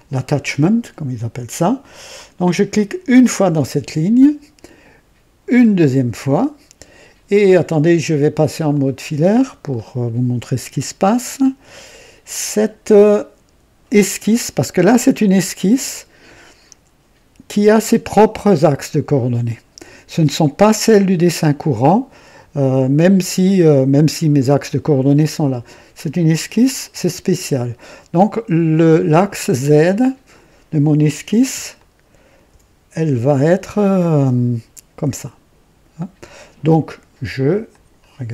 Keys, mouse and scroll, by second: 3.3 click, 5.7 click, 8.7 click, 9.7-10.1 scroll up 1, 11.2 click, 31.7-32.5 ctrl+alt+drag, 33.6-34.3 ctrl+alt+drag, 37.6 click.